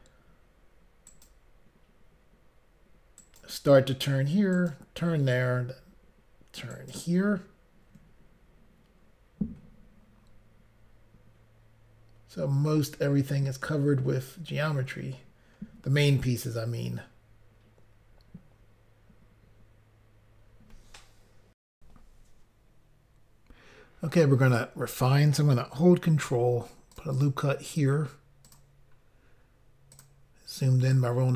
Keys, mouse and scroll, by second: 0.9 shift+click, 1.1 ctrl+right click, 1.3 ctrl+right click, 3.2 ctrl+right click, 4.6 ctrl+right click, 4.8 ctrl+right click, 6.8 ctrl+right click, 9.7 scroll down 2, 10.3 scroll down 1, 12.9 scroll up 2, 21.7 Insert, 26.2 ctrl+r, 26.9 click, 27.1 click, 28.4 click, 28.5 click, 29.0 scroll up 1, 29.9 click, 30.0 click, 30.9 click.